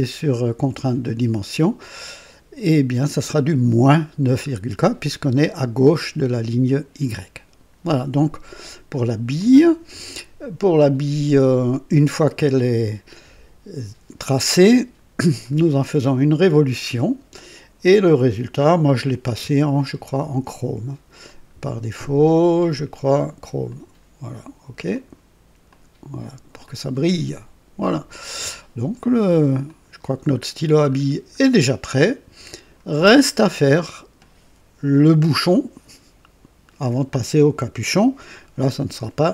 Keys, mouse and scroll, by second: 9.3 click, 15.1 click, 16.7 click, 20.0 ctrl+d, 21.2 click, 23.6 click, 24.9 click, 25.6 click, 26.6-28.6 drag, 29.6 click, 30.3-31.5 scroll down 3, 31.8 right click, 33.0 scroll down 1, 33.4 right click.